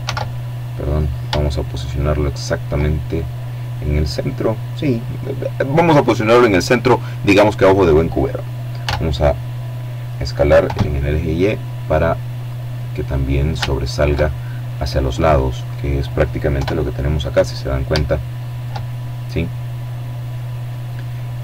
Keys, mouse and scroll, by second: 0.3 shift+middle click, 7.7 s, 9.5 y, 11.3 click, 11.7 middle click, 11.7 right click, 12.3 shift+middle click, 13.1 shift+middle click, 14.8 click, 15.4 KP_7, 17.0-18.0 shift+middle drag, 20.0-21.4 middle drag.